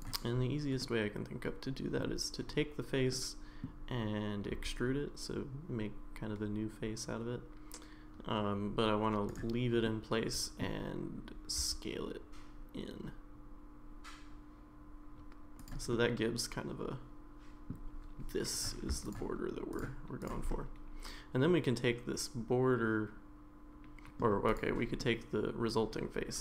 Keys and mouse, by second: 0.8-2.0 middle drag, 3.1 middle click, 4.5 e, 9.8 middle click, 11.7 s, 15.9-17.7 middle drag, 19.0 shift+click, 20.2 shift+click, 20.5-24.2 middle drag, 24.5 click, 25.0-26.4 middle drag.